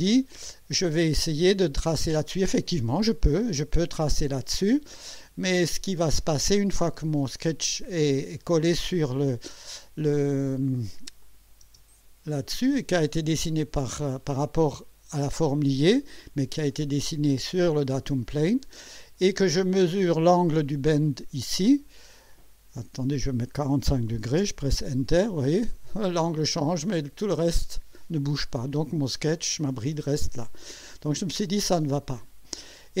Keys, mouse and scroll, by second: 9.0 click, 10.4 scroll down 2, 11.2 click, 11.6 space, 16.7 click, 17.3 space, 19.9 click, 22.7 click, 23.9 KP_4, 24.1 KP_5, 24.4 KP_Enter, 25.7-26.4 drag, 32.0 click.